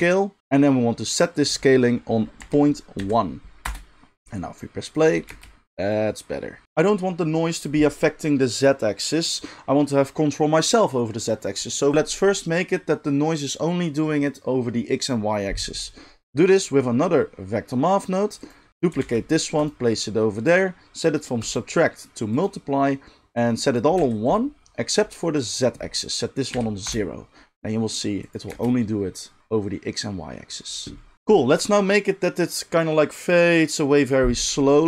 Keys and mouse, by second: 0.0-16.2 drag, 5.3 space, 16.2-18.4 middle drag, 18.4 click, 18.5-21.6 middle drag, 19.0 shift+d, 21.6-24.3 drag, 24.3-25.4 middle drag, 25.4-34.8 drag, 28.5 space.